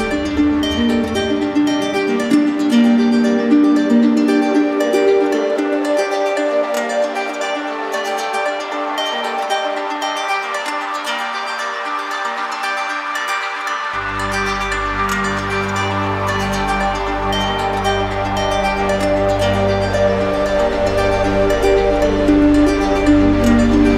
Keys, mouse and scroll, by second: 3.3 right click, 3.7 shift+right click, 4.8 alt+right click, 5.9 click, 6.1 right click, 6.2 right click, 6.3 click, 6.3 click, 6.5 click, 6.6 click, 6.7 alt+right click, 6.9 click, 7.1 click, 7.1 right click, 7.2 right click, 7.3 click, 7.3 right click, 7.4 right click, 7.5 click, 7.7 right click, 7.9 click, 8.0 click, 8.1 click, 8.2 click, 8.3 right click, 8.5 click, 8.5 right click, 8.7 right click, 8.8 click, 8.9 right click, 9.0 ctrl+z, 9.1 click, 9.1 right click, 9.5 click, 9.7 ctrl+z, 9.7 click, 9.8 click, 9.9 right click, 10.0 right click, 10.1 click, 10.2 right click, 10.3 click, 10.4 click, 10.4 click, 10.5 click, 10.7 ctrl+z, 10.7 click, 10.7 right click, 10.8 click, 11.0 click, 11.2 click, 11.4 right click, 11.5 click, 11.8 click, 12.0 click, 12.1 click, 12.2 right click, 12.2 alt+right click, 12.2 right click, 12.4 click, 12.6 click, 12.7 click, 12.7 alt+right click, 12.9 right click, 13.1 shift+right click, 13.5 click, 13.6 right click, 13.9 alt+right click, 14.1 alt+click, 14.4 click, 14.6 alt+right click, 15.0 click, 15.4 right click, 15.7 click, 15.9 click, 16.6 right click, 16.8 right click, 17.7 right click, 17.9 right click, 18.0 right click, 19.2 click, 19.3 click, 19.7 click, 20.3 right click, 20.5 z, 20.5 click, 20.6 click, 20.7 alt+click, 22.3 click, 22.4 click, 23.8 click, 23.9 click, 23.9 right click.